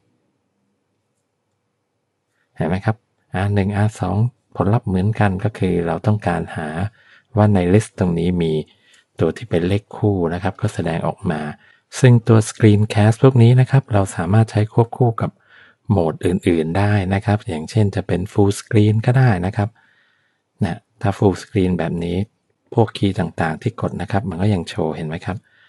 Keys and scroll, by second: 23.2 Up, 23.9 Down, 24.9 Left.